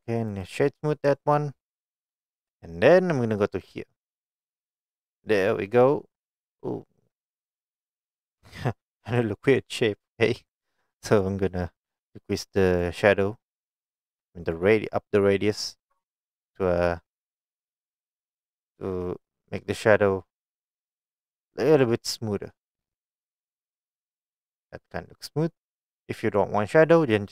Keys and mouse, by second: 0.4 right click, 11.2 click, 14.9-20.4 drag, 21.4-21.9 drag, 22.4-24.7 drag.